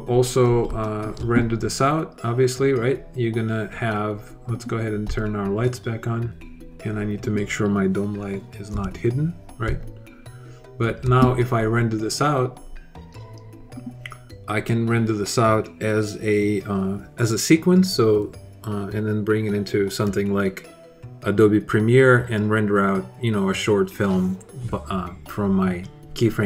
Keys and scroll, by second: 8.5 h, 9.4 alt+h.